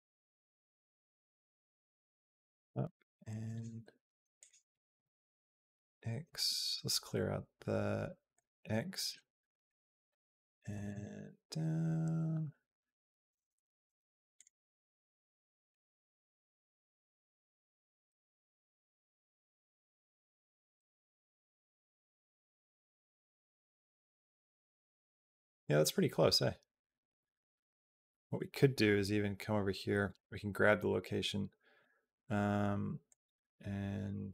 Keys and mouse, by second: 4.2 click, 4.9 r, 8.2-9.4 drag, 10.5 g, 14.5 middle click, 15.9 middle click, 16.3 click, 16.6 g, 18.2 middle click, 18.7 g, 20.9 middle click, 21.3 middle click, 21.8 middle click, 22.9-30.0 drag, 32.9-34.3 drag.